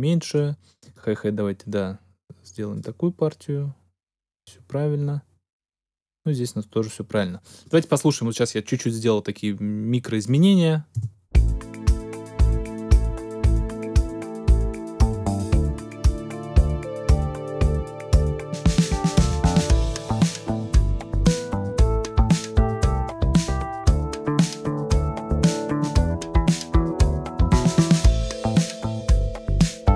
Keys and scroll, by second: 10.9 space.